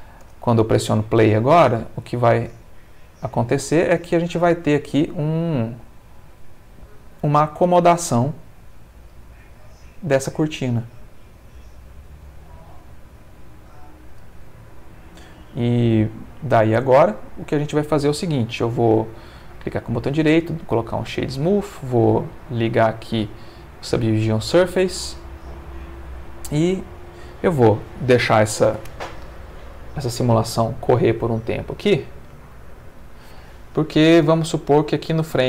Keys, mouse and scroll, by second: 0.2 space, 4.2 middle click, 8.3 middle click, 18.2 Escape, 19.2 right click, 20.2 click, 21.7 click, 22.4 click, 23.9 click, 24.7 space, 35.1 space.